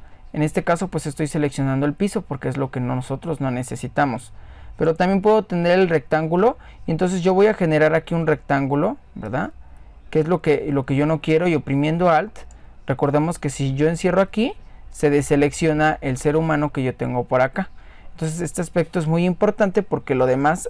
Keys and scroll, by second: 12.5 typing.